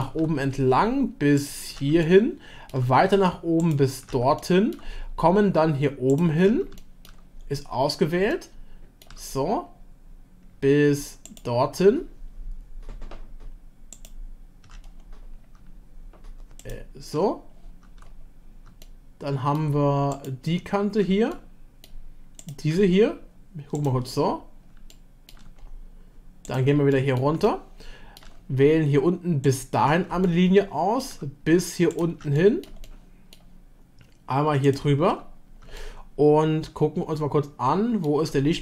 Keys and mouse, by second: 1.4 ctrl+click, 2.0 shift+click, 3.6 ctrl+click, 4.4 shift+click, 4.7 shift+middle click, 6.8 shift+middle click, 8.5 shift+click, 16.6 shift+click, 18.8 shift+middle click, 21.3 shift+middle click, 24.9-25.4 shift+middle drag, 26.9-27.3 middle drag, 27.4-28.2 shift+middle drag, 30.3 shift+middle click, 32.4 click, 32.8-33.3 shift+drag, 35.8-38.1 shift+middle drag.